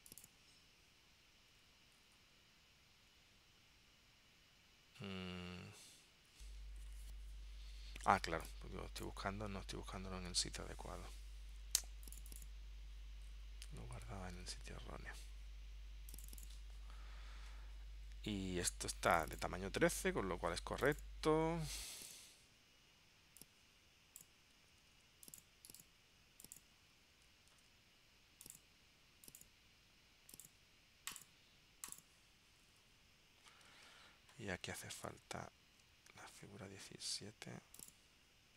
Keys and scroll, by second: 24.9 super+x, 27.6 super+v, 33.9 super+Tab, 35.8 super+Tab.